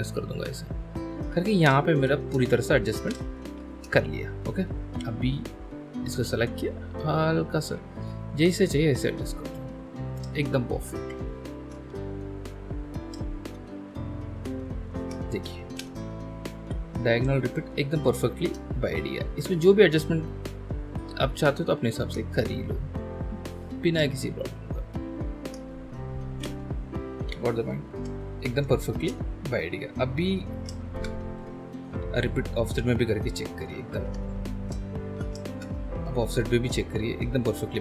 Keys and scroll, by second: 1.6 ctrl+alt+shift+space, 3.0 space, 15.8 space, 17.1 ctrl+alt+space, 26.4 space, 28.0 alt+space, 30.9 ctrl+h, 34.1 Escape, 35.0 ctrl+e, 35.5 ctrl+h.